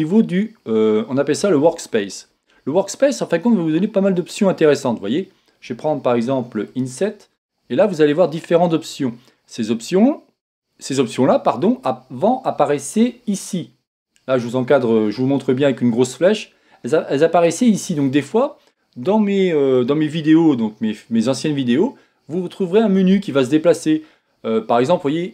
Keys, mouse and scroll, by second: 1.9 click, 4.2 click, 6.7 click.